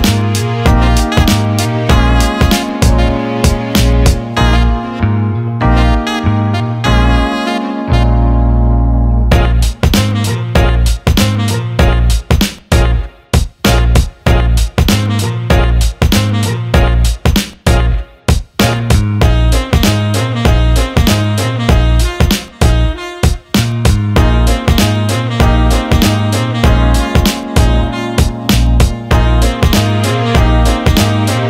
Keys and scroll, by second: 0.5-1.3 typing, 4.3 Escape, 5.0 Delete, 5.3 Delete, 18.4-19.9 typing, 27.5 Delete.